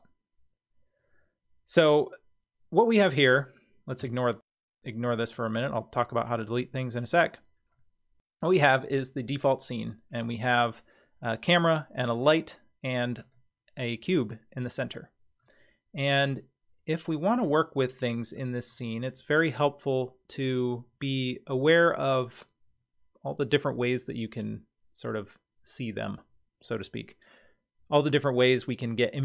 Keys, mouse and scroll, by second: 2.8-3.4 middle drag, 4.0 x, 5.1 x, 7.7-8.6 middle drag, 9.7-10.2 middle drag, 13.2 click, 15.4-18.4 middle drag.